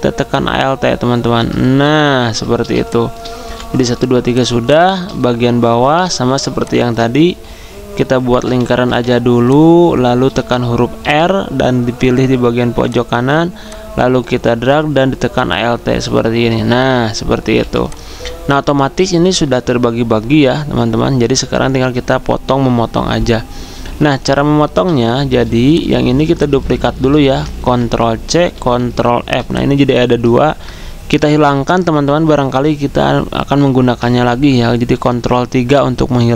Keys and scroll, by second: 3.4 v, 8.8 v, 11.0 r, 27.3 ctrl+z, 28.4 ctrl+c, 29.2 ctrl+f, 30.3 ctrl+z.